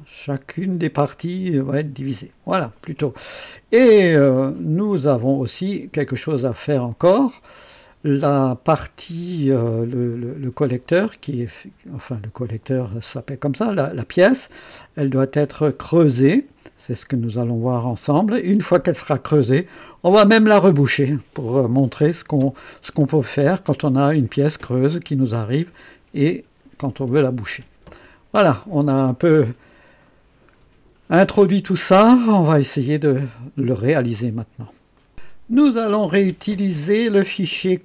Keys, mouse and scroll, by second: 6.0 click, 10.1 click, 15.8 click, 34.9 right click.